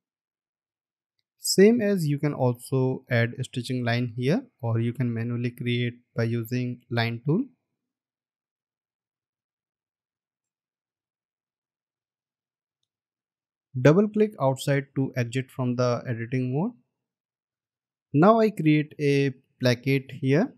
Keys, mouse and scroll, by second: 0.9-1.3 alt+scroll down 1, 1.4 scroll up 1, 2.5-3.0 alt+scroll up 1, 12.6-13.3 scroll down 2, 15.0 double click, 16.5-17.4 alt+scroll down 1, 17.4 space, 18.3-18.7 alt+scroll up 1.